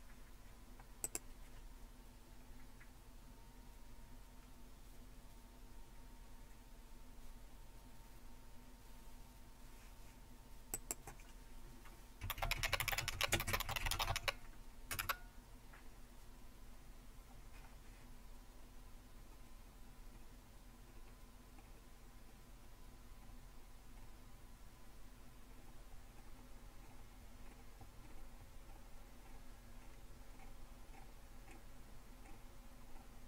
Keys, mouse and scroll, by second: 1.0-2.9 drag, 10.7-12.2 drag, 12.0-17.4 typing, 14.9 Return, 18.3-19.1 scroll down 1, 21.6-21.9 scroll down 1, 23.2-23.6 scroll down 1, 32.3-32.6 scroll down 2.